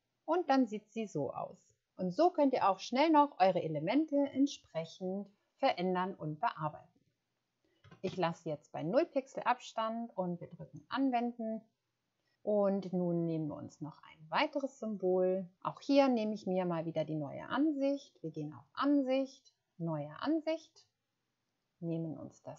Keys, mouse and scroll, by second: 0.0 Return, 7.8 typing, 8.8 0.